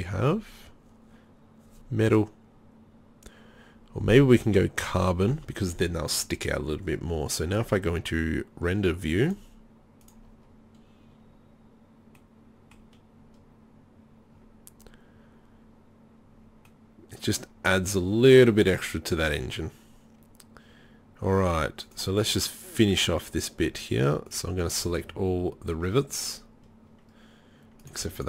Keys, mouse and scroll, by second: 5.8 middle click, 6.0 middle click, 6.2-9.3 drag, 24.3-28.2 drag.